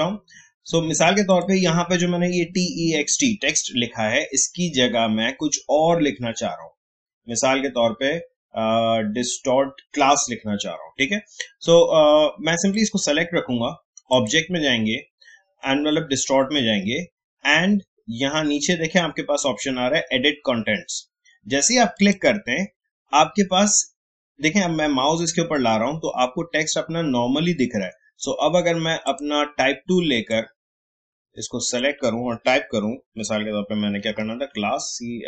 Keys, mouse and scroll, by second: 1.3 click, 12.7 click, 21.9 click, 29.0-34.1 drag, 34.1 typing.